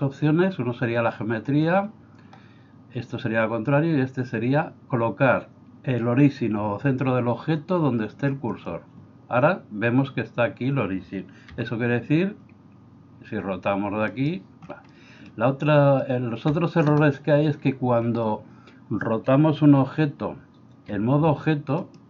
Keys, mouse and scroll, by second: 11.5 r, 14.9 middle click, 16.0-16.4 shift+middle drag, 20.9 r.